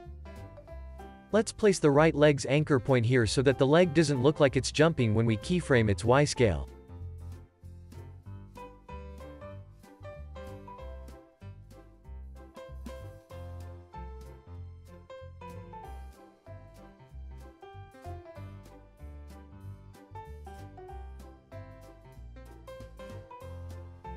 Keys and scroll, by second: 0.9 Tab, 5.7 Tab, 12.0 alt+shift+s, 16.0 z, 17.2 x, 20.0 alt+shift+s.